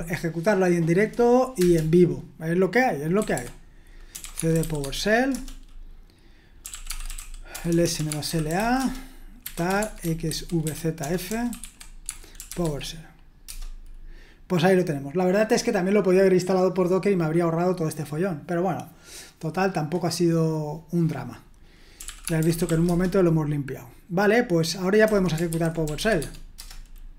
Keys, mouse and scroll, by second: 0.0-0.6 typing, 1.6 Return, 3.2-13.5 typing, 21.7-23.2 typing, 24.8-26.5 typing, 26.6 Return.